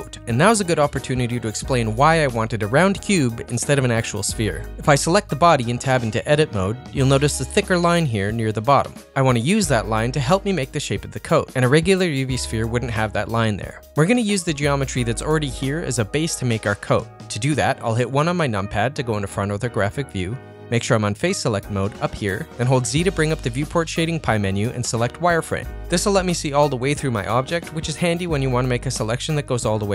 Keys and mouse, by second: 0.0-3.1 middle drag, 4.4 Tab, 4.9 click, 5.3 middle click, 6.2 Tab, 7.5 middle click, 14.2 click, 14.7 middle click, 15.8-17.1 middle drag, 17.6 KP_1, 18.4 shift+middle click, 18.8 ctrl+middle click, 24.3 z.